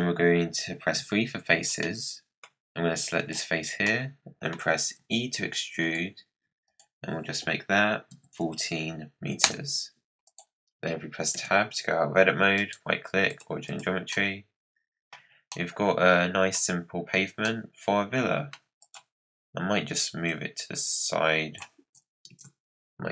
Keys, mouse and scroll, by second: 0.9 3, 1.4-1.8 scroll up 4, 1.8-3.1 middle drag, 3.1 click, 3.6 scroll down 4, 3.8 middle click, 4.5 scroll down 2, 4.9 e, 6.6-9.7 drag, 10.2 click, 11.3 Tab, 12.5-13.6 right drag, 13.6 click, 14.1-15.1 middle drag, 15.1 scroll down 1, 15.2 scroll up 4, 15.5-16.5 middle drag, 16.5-17.4 scroll down 2, 17.4-18.8 middle drag, 18.8 click, 20.2 click, 22.3 z.